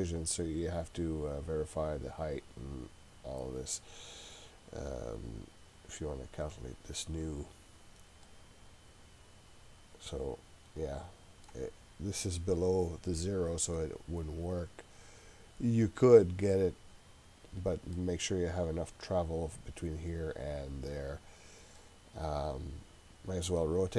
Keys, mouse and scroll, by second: 6.2-7.2 drag, 8.2-11.6 middle drag, 13.8-18.0 middle drag, 21.8-23.6 middle drag.